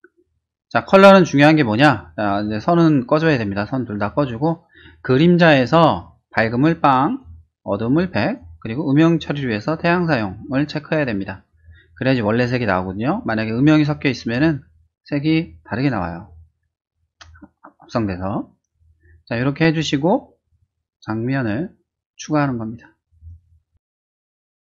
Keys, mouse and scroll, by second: 2.4 click, 5.2 click, 6.8-7.2 drag, 7.9-8.3 drag, 10.0 click, 12.8-13.2 drag, 13.4-14.4 drag, 17.1 middle click, 17.6 click, 19.3 middle click, 20.8 click, 21.6 click, 22.2 click, 22.8-23.9 typing, 24.3 Return.